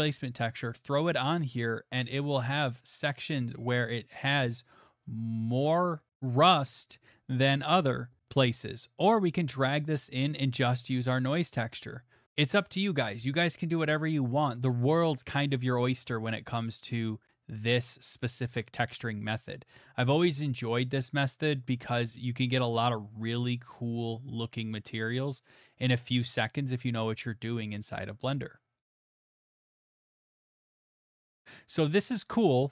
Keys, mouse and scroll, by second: 2.0 middle click, 2.1 middle click, 2.1 scroll, 2.8 scroll, 3.6-4.3 scroll, 4.7 middle click, 5.3 middle click, 5.7 shift+middle click, 6.4 middle click, 6.4 middle click, 6.5 shift+middle click, 7.1 shift+middle click, 9.7 click, 11.3 click, 12.2 middle click, 12.4 middle click, 12.4 middle click, 13.7 middle click, 14.6 click, 15.5 middle click, 15.8 middle click, 16.3 shift+middle click, 16.3 shift+middle click, 16.9 middle click, 18.6 middle click, 18.6 middle click, 18.7 middle click, 19.0 middle click, 19.2 shift+middle click, 19.2 middle click, 19.3 middle click, 19.8 middle click, 19.9 middle click, 19.9 middle click, 20.5 shift+middle click, 22.1 click, 25.9 click, 28.8 click, 28.9 middle click, 28.9 middle click, 30.1 middle click, 31.3 middle click, 31.4 middle click, 32.4 scroll.